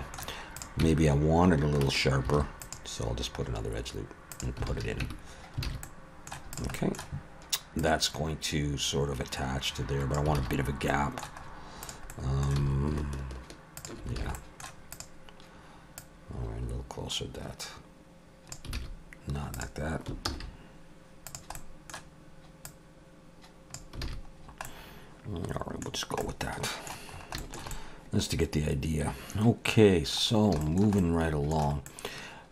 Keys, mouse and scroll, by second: 0.6 click, 0.8 Tab, 2.3 ctrl+r, 4.7 alt+a, 5.0 Tab, 5.4 scroll down 2, 5.6 alt+a, 5.8 middle click, 6.5 click, 6.7 middle click, 7.8 click, 10.4 alt+a, 10.5-11.4 scroll down 4, 11.4 middle click, 11.4-11.8 scroll up 3, 11.8 click, 12.1 middle click, 12.6 s, 14.2 alt+a, 14.3 middle click, 14.9 click, 16.0 click, 18.8 alt+a, 19.5 click, 20.3 ctrl+z, 21.3 click, 21.6 middle click, 22.7 click, 24.0 alt+a, 24.4 scroll down 2, 25.9 scroll down 2, 26.2 middle click, 27.1 scroll up 3, 27.4 shift+middle click, 27.7 middle click, 30.3 scroll down 3, 30.6 shift+middle click, 31.0 middle click, 31.9 middle click, 32.1 shift+middle click.